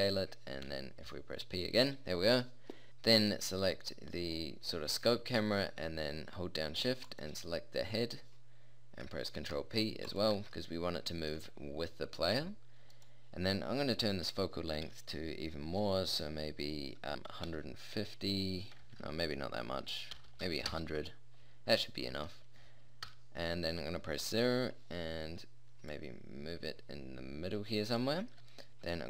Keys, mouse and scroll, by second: 1.1 p, 2.9 a, 4.6-5.1 middle drag, 9.4 ctrl+p, 10.4 a, 10.7-12.6 middle drag, 13.1-20.7 drag, 20.7 0, 21.8-22.3 middle drag, 23.1 KP_0.